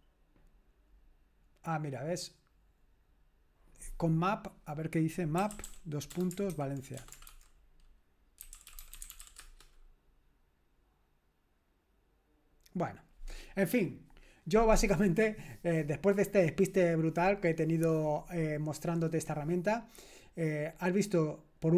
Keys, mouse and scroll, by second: 0.3-4.2 scroll down 1, 4.6 click, 5.2-9.7 typing, 13.3-21.7 scroll up 1.